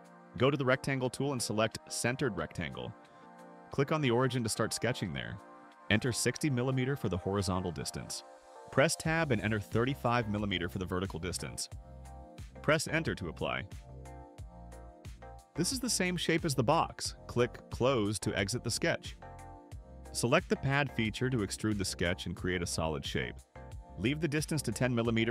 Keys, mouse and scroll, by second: 0.7 click, 3.3 click, 4.5 click, 7.5 6, 7.9 0, 8.8 Tab, 10.1 3, 10.7 5, 12.8 Return, 18.9 click, 20.9 click.